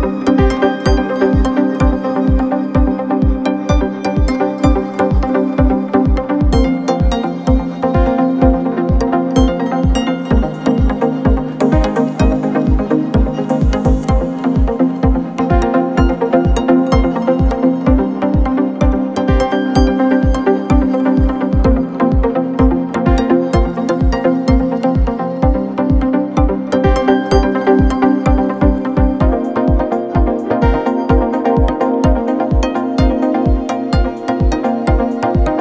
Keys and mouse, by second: 0.2 r, 4.8-5.5 middle drag, 5.7 shift+click, 9.8 s, 11.8 s, 15.0 middle click, 15.8 g, 18.9 click, 18.9 right click, 20.2 s, 26.1-26.8 drag, 26.1-26.8 right drag, 26.8-28.0 middle drag, 29.2 middle click, 30.7 s, 34.7-35.6 middle drag.